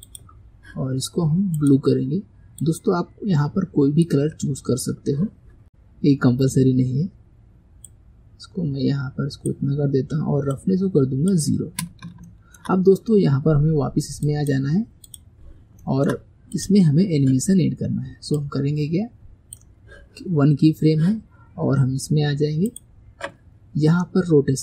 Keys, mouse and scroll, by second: 0.1 click, 1.7-4.6 drag, 5.6-6.7 scroll down 4, 7.9-12.3 drag, 12.3-14.3 shift+middle drag, 14.3 click, 15.1 click, 15.9 shift+middle click, 16.6 click, 18.4-21.4 drag, 22.7-24.6 drag.